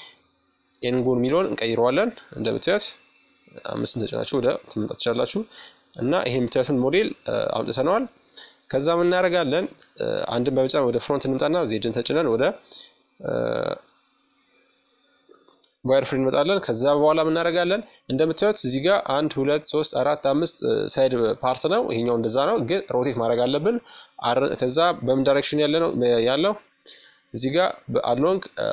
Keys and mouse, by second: 0.1-1.1 middle drag, 1.0 KP_5, 1.8 middle click, 3.4 Tab, 3.8 s, 4.0 middle click, 7.3 KP_1, 8.4 z, 9.8-11.6 middle drag, 22.8-24.6 middle drag, 23.9 KP_5.